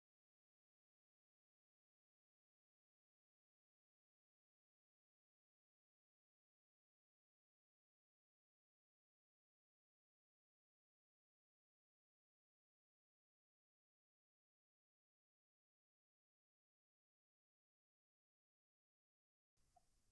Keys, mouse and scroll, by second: 1.0 click, 4.7 middle click, 5.7-6.7 scroll up 3, 7.0 middle click, 8.8 middle click, 9.2 right click, 10.0 click, 11.0 middle click, 11.1 typing, 11.8-12.9 drag, 12.9 middle click, 14.4-14.7 typing, 14.6 middle click, 15.2 scroll down 1.